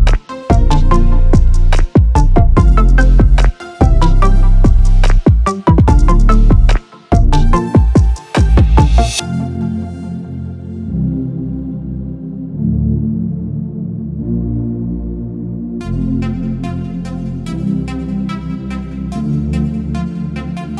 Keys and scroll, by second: 11.1 s, 11.3 Caps_Lock, 11.5 p, 11.7 i, 11.9 k, 17.2 s.